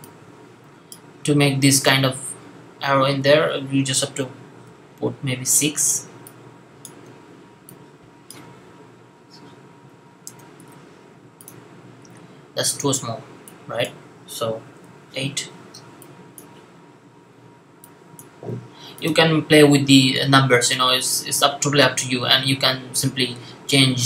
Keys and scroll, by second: 4.5-5.3 typing, 6.9 typing, 8.2 typing, 9.8 Right, 14.7-16.3 typing, 18.3 typing.